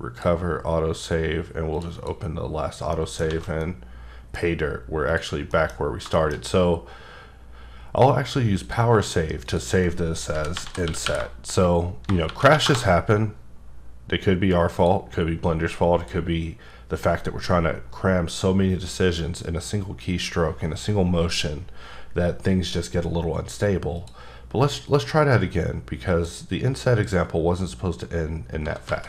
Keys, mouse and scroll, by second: 1.7 click, 1.9 double click, 3.2 alt+middle click, 3.3 alt+a, 3.6 middle click, 5.1 click, 5.5 middle click, 5.8 scroll up 2, 6.1 shift+middle click, 6.4 scroll up 1, 8.6 click, 9.4 click, 10.3-13.0 typing, 14.7 click, 16.0 click, 24.0 click, 24.9 click, 28.6 s, 28.9 z.